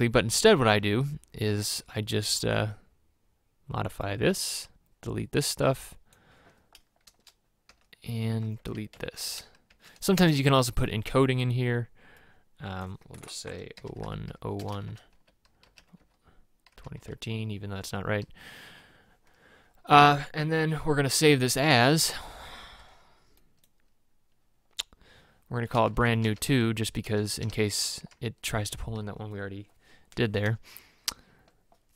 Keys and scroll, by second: 7.1 BackSpace, 7.7 BackSpace, 8.7 Up, 8.9 Right, 9.3 Left, 9.8 shift+End, 10.2 BackSpace, 13.8-18.2 typing, 26.0-28.1 typing.